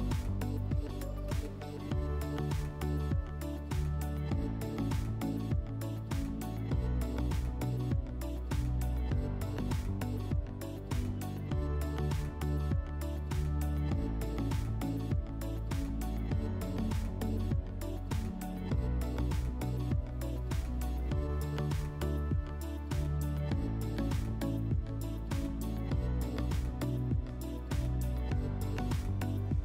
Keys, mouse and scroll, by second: 2.3-2.9 scroll, 2.9 click, 3.6 scroll, 4.5-5.1 scroll, 7.3 click, 8.4 scroll, 8.8 1, 13.6 click, 14.6 1, 16.4 middle click, 17.1 click, 17.4-17.9 scroll, 20.7 click, 22.9 click, 24.6 click.